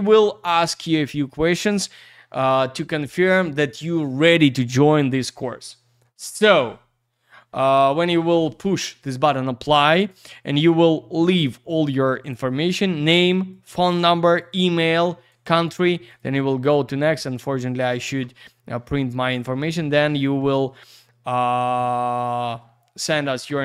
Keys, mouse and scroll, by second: 10.1 click, 11.3 click, 11.4 click, 13.5 click, 13.6 click, 14.4 click, 14.5 click, 15.3 click, 15.4 click, 16.1 click, 16.2 click, 21.6 click, 21.8 click.